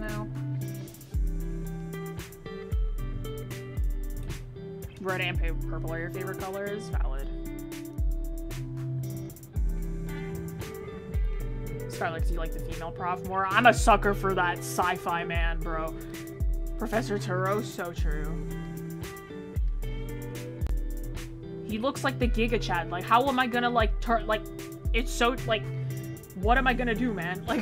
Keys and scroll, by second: 22.3 ctrl+z.